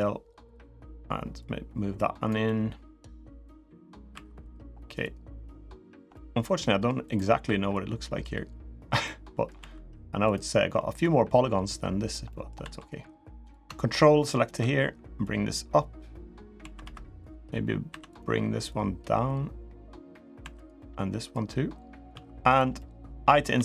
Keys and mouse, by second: 1.2 click, 2.2 middle click, 3.1 middle click, 3.9 3, 4.8 click, 5.9 middle click, 6.4 3, 7.5-8.6 drag, 8.8 middle click, 9.3 2, 10.0 click, 10.8-11.9 drag, 12.0 middle click, 15.0-16.1 drag, 15.0 2, 16.3 2, 16.6 3, 17.0 click, 17.6 2, 17.8 click, 18.4-20.0 drag, 20.1 2, 21.1 click, 21.9 3, 22.5 middle click, 23.3 i.